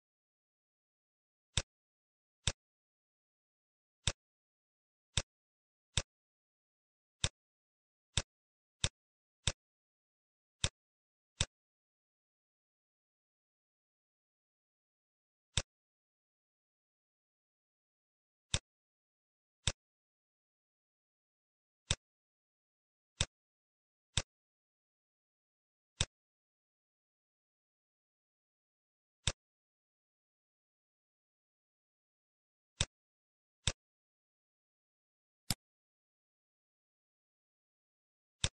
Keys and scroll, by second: 4.2 shift+f, 4.5 shift+d, 17.9 shift+d, 33.1 shift+d, 36.8 shift+d.